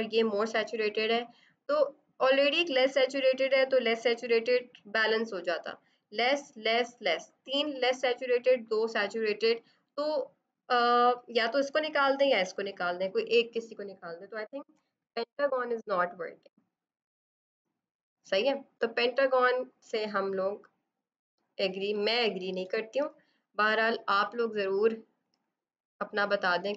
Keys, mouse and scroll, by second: 15.5 typing, 17.7 click, 19.8 e, 22.5 b, 24.4 alt+click, 25.2 right click, 25.8 click.